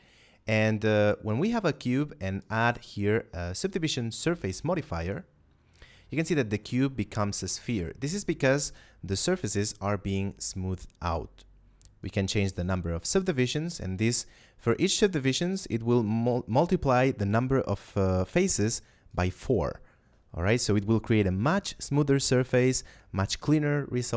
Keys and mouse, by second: 1.3 middle click, 2.3 click, 11.9 click, 19.0 click.